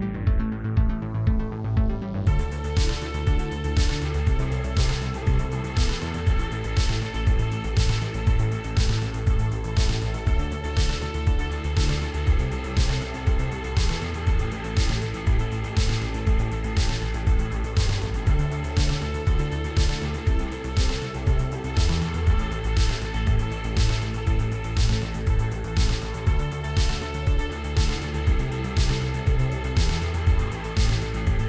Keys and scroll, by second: 2.5 g, 2.7 shift+z, 3.8 alt+a, 6.1 s, 7.1 s, 8.0 g, 8.2 shift+z, 9.2 alt+a, 13.8 g, 14.1 shift+z, 14.9 g, 15.1 shift+z, 16.8 alt+a, 21.5 ctrl+p, 22.6 m, 23.7-24.3 typing, 24.5 Return.